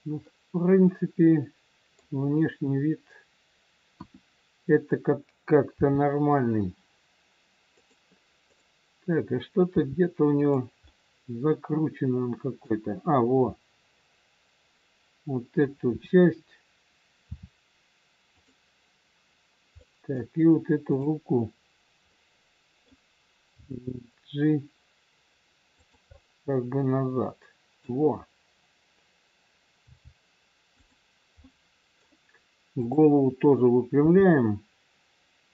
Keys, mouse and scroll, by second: 0.3 middle click, 3.9 KP_1, 5.8 r, 8.4 click, 9.7 r, 10.8 middle click, 15.9 KP_7, 17.3 r, 19.7 middle click, 20.8 click, 22.0 middle click, 23.5 g, 26.1 middle click, 29.8 g, 31.4 middle click, 32.8 click, 34.1 r.